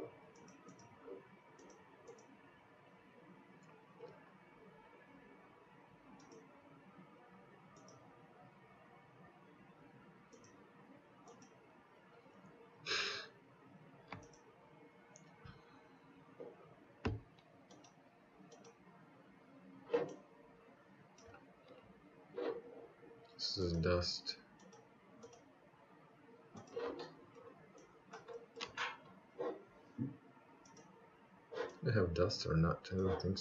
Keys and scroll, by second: 32.9 Delete.